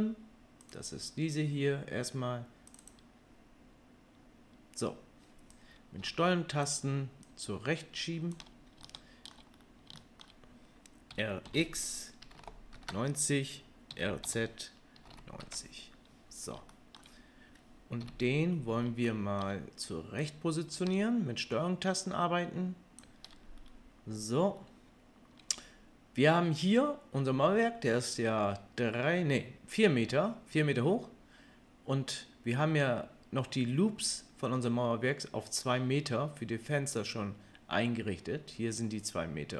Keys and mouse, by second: 3.4-5.6 middle drag, 5.6-39.5 drag, 11.1 r, 13.9 r, 18.0 KP_3.